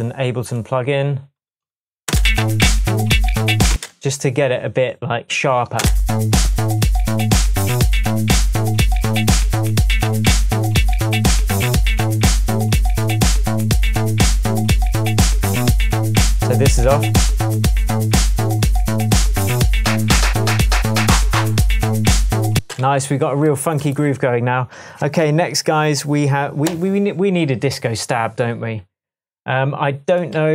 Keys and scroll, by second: 2.1 space, 3.7 space, 5.8 space, 22.6 space, 22.9 s.